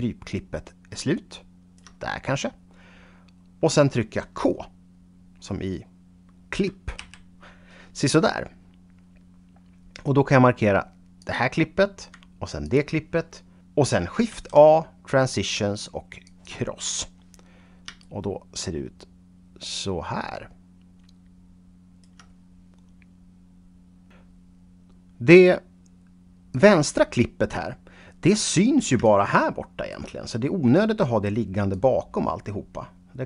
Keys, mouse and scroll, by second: 7.0 k, 11.2 click, 12.6 shift+click, 14.3 shift+a, 16.2 click, 26.5 click, 27.1-28.0 scroll down 2, 29.0 shift+right click, 31.7 click.